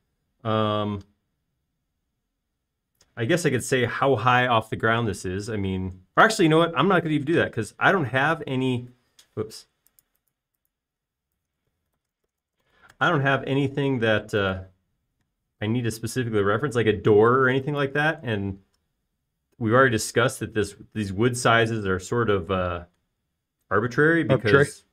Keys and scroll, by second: 8.6 m, 11.6-14.4 typing, 16.8 m.